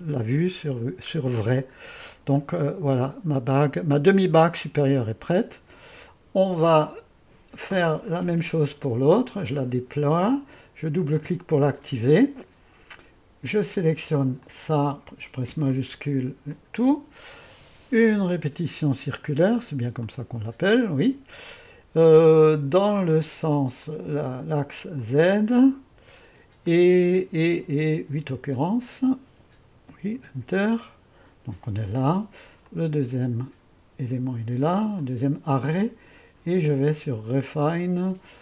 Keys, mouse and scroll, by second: 1.4-1.8 scroll up 1, 1.8-2.4 scroll down 1, 2.4-5.2 middle drag, 4.9-5.7 typing, 11.9 click, 14.4-15.5 drag, 16.5 click, 20.0-23.2 drag, 23.8-28.2 drag, 28.5-29.8 drag, 29.5-30.3 typing, 32.6-36.3 drag, 37.3 click.